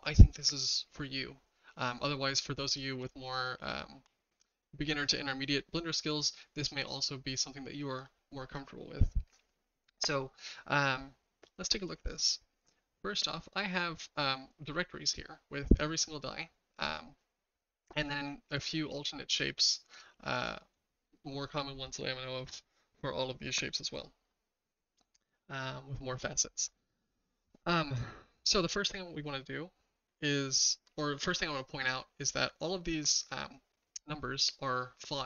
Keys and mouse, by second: 13.7 click, 18.5 click, 21.1-22.4 shift+middle drag, 31.0-31.4 middle drag.